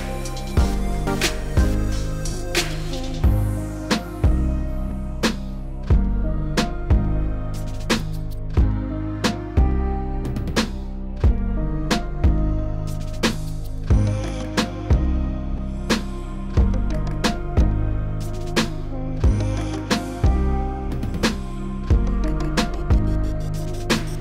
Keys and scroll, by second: 0.0 s, 4.7 s, 8.0 s, 8.7 s, 13.3 4, 16.7 b, 18.9 s, 23.3 s.